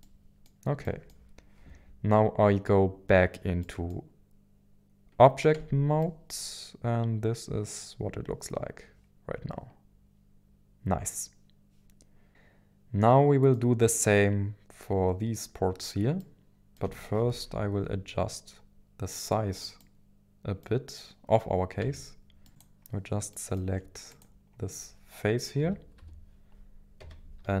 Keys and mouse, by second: 0.0 middle click, 0.8 middle click, 3.6 middle click, 5.6 Tab, 6.0-13.6 middle drag, 16.2 middle click, 17.2 KP_1, 17.4 KP_7, 19.8-21.8 middle drag, 21.8 Tab, 22.4 middle click, 22.5 click, 23.3 middle click, 24.2-25.6 drag, 25.6 KP_1, 25.9 KP_7, 27.0 g, 27.4 z.